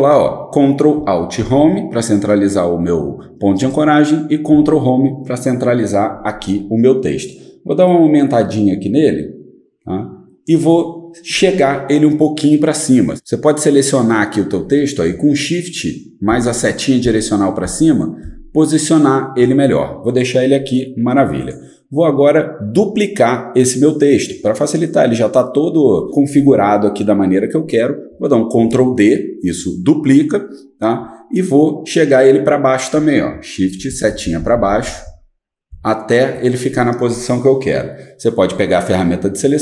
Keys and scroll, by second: 1.4 ctrl+alt+Home, 4.5 ctrl+Home, 13.1 shift+Up, 16.3 shift+Up, 17.0 shift+Up, 17.6 shift+Up, 18.2 shift+Up, 28.5 ctrl+d, 33.6 shift+Down, 33.9 shift+Down, 34.1 shift+Down, 34.2 shift+Down, 34.4 shift+Down, 34.5 shift+Down, 34.8 shift+Down, 35.7 shift+Down.